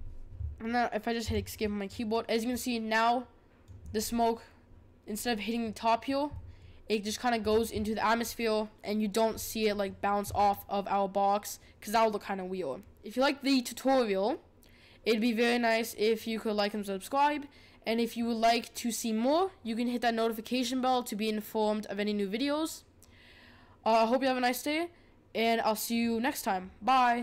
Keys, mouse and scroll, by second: 1.9-4.0 drag, 4.0-5.2 scroll down 3, 5.2-9.3 middle drag, 9.3-9.6 scroll up 3, 9.6-27.2 middle drag.